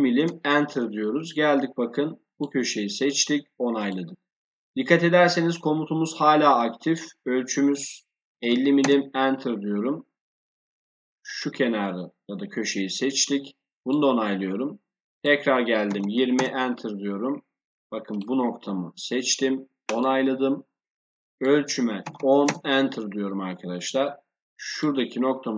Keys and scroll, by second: 0.1 Return, 8.2 5, 8.4 0, 8.7 Return, 15.9 0, 16.3 Return, 22.0 1, 22.1 0, 22.4 Return.